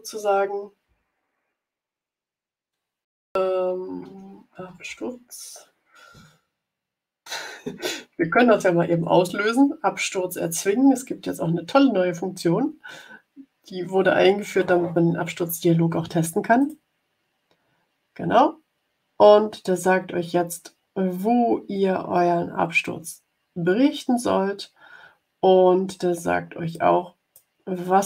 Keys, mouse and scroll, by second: 3.3-5.4 typing, 16.5 click, 26.6 click, 27.4-28.0 scroll down 12.